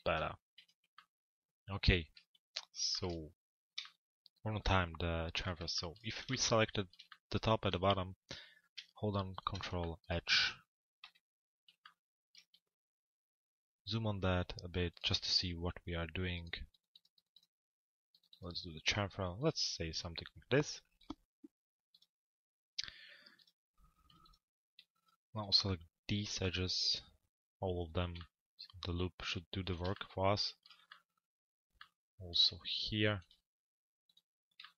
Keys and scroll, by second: 0.1 p, 10.6 z.